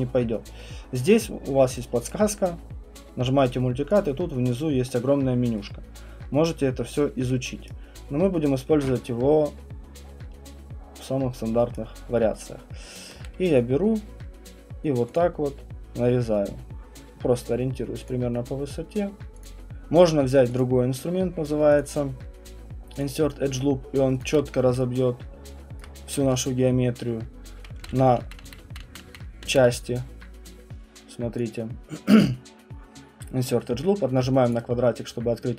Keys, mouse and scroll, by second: 1.2 scroll, 2.1 right click, 2.1-3.5 scroll, 4.0 click, 4.3-6.2 scroll, 7.6 right click, 11.7 right click, 15.2 ctrl+click, 18.1 ctrl+click, 19.4 ctrl+click, 20.6 ctrl+click, 24.4-25.7 scroll, 25.8 alt+click, 26.2 space, 28.2 ctrl+z, 28.4 ctrl+z, 28.6 ctrl+z, 31.4 click, 34.5 click.